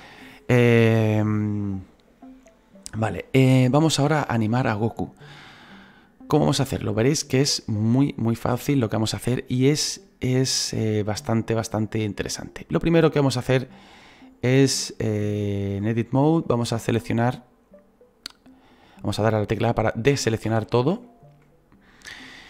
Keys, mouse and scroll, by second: 10.7-13.7 drag, 13.7-15.7 right drag, 15.7-19.5 drag, 19.5 a, 20.1 a, 20.4 a.